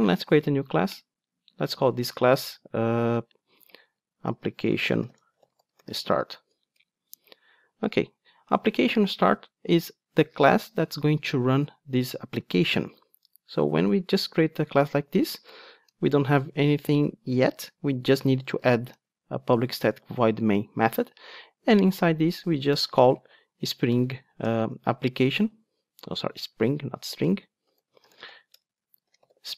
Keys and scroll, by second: 17.4 Tab.